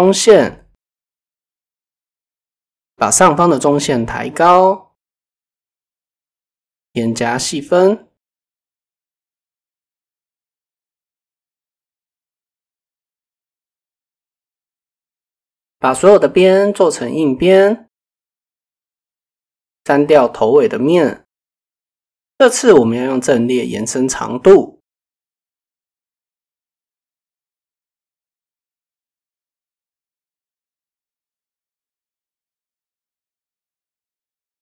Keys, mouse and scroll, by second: 0.5 middle click, 1.0 drag, 2.6 drag, 4.2 click, 5.4 a, 6.5-7.3 drag, 9.2 click, 10.0 click, 10.2 click, 11.1 click, 12.3 middle click, 12.9 middle click, 14.2 middle click, 15.7 middle click, 16.5 middle click, 17.1 middle click, 17.6 middle click, 20.4 click, 21.0 KP_7, 22.6 click, 25.6-27.4 drag, 28.1 shift+click, 31.3 shift+click, 32.6 Tab, 34.3 Tab.